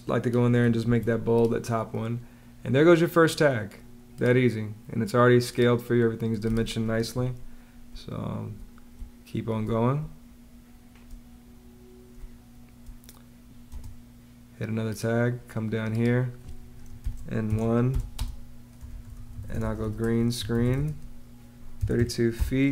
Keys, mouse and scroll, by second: 0.7 super+b, 6.8 Escape, 7.7 space, 12.0 space, 13.5 space, 16.6-22.7 typing.